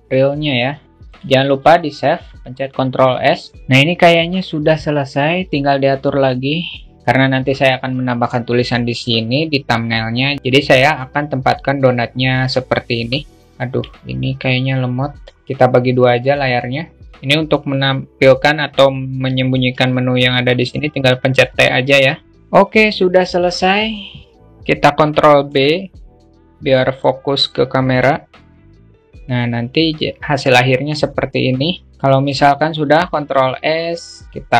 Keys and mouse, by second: 0.0 alt+shift+q, 0.0-1.0 alt+shift+middle drag, 2.7 ctrl+s, 4.9 q, 5.8-7.0 alt+shift+middle drag, 13.4 ctrl+z, 15.3-19.9 drag, 19.9 t, 24.8 ctrl+b, 32.5 ctrl+s.